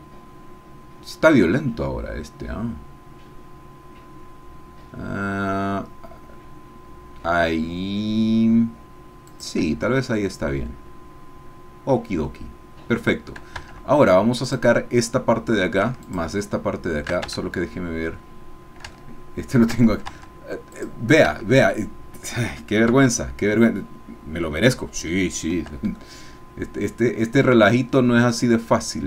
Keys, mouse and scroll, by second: 9.3 shift+click, 9.9-12.4 shift+drag, 14.1 Tab, 14.4 click, 16.2 shift+click, 17.3 shift+Tab, 18.9 shift+click, 20.2 Tab, 20.8 click, 21.3 Tab, 22.9 a, 25.3-25.8 scroll down 2, 25.9-29.0 shift+middle drag.